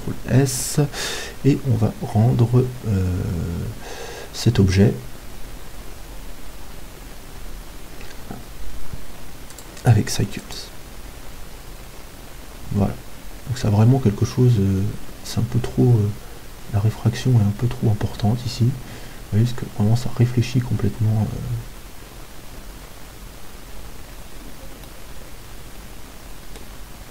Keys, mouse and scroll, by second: 7.0-7.4 scroll down 1, 7.4-9.5 scroll up 1, 9.5-11.5 drag, 24.9-26.8 middle drag.